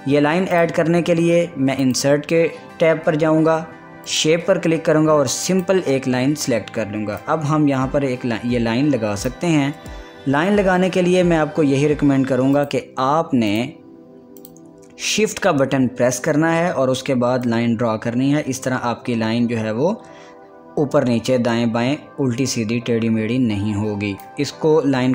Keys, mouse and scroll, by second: 1.4 click, 7.3-10.9 drag, 10.9 ctrl+z, 13.2 click, 17.6 click, 18.1-25.1 shift+drag.